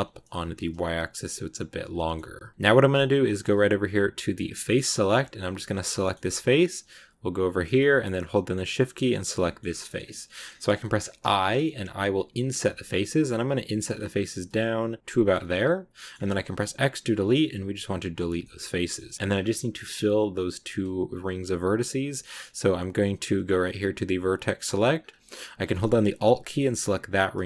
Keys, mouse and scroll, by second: 1.9-4.2 middle drag, 4.2 click, 5.6 right click, 5.8-9.0 shift+middle drag, 9.0 shift+right click, 9.3 shift+middle click, 9.5-9.9 scroll up 2, 9.6 middle click, 10.2-13.6 middle drag, 13.6 typing, 15.2 scroll down 2, 15.4 middle click, 16.0 scroll up 2, 16.4 x, 18.3 shift+middle click, 19.2 scroll up 2, 22.1-24.1 middle drag, 24.1 click, 24.7 middle click, 24.8 scroll up 1, 24.9-26.7 scroll down 1, 26.7 alt+right click, 27.3-27.4 middle drag.